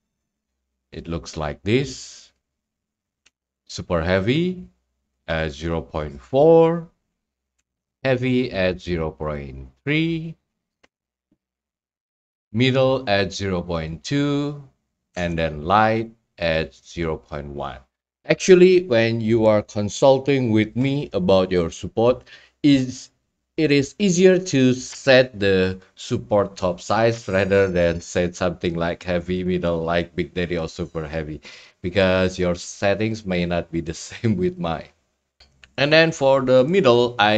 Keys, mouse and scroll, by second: 0.3 click, 0.9-1.4 scroll, 3.2 Tab, 5.2-6.3 drag, 7.6 Tab, 9.3 click, 10.8 Tab, 11.6 scroll, 13.9 click, 14.9 click, 15.1 Tab, 15.9 Tab, 17.0-18.1 drag, 29.4 scroll, 33.4-34.2 scroll, 34.2-34.5 scroll, 34.5 middle click, 35.2 middle click, 35.2 middle click.